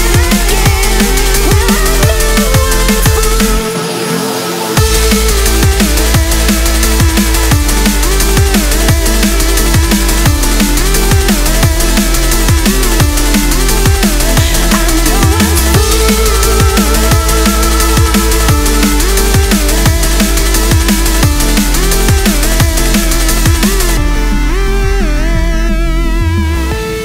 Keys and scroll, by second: 4.6 ctrl+z, 24.2 ctrl+j.